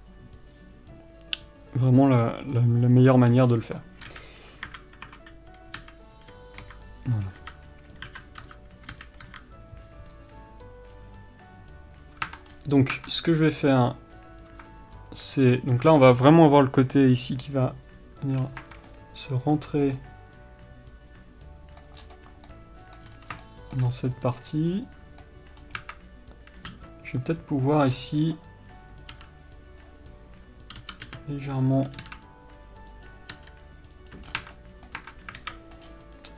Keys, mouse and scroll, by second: 3.3-13.4 middle drag, 3.7-4.4 scroll down 1, 4.4 KP_1, 6.1 KP_1, 9.2 KP_1, 11.2-12.6 scroll down 1, 12.6 Tab, 12.8-13.2 scroll up 1, 13.2 Tab, 13.4-14.8 scroll up 1, 14.8 Tab, 19.2 middle click, 22.3 scroll up 1, 22.8 middle click, 23.4-23.7 scroll down 1, 23.7 shift+middle click, 24.5 scroll down 1, 24.7 middle click, 25.9 scroll up 1, 28.4-32.3 middle drag, 28.4 b, 33.6 r, 34.6 scroll down 1, 34.7 Tab, 34.9-36.3 middle drag, 35.3 Tab, 35.7 alt+a, 36.2-36.3 scroll up 1.